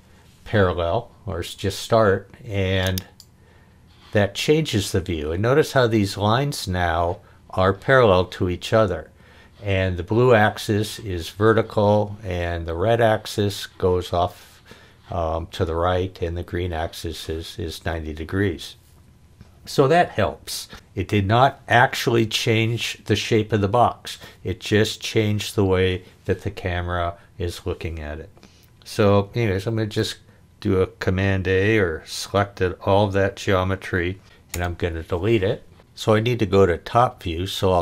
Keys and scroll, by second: 0.0-0.1 typing, 29.7 super+a, 34.5 BackSpace.